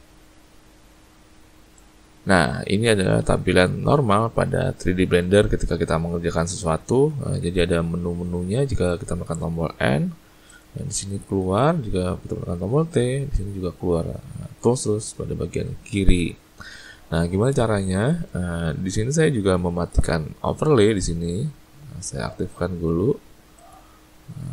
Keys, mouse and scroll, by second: 7.1 n, 7.5 n, 10.5 click, 11.3 n, 11.5 n, 12.8 t, 13.2 t, 13.8 t, 14.2 t, 15.5 t, 16.2 t, 23.6 click.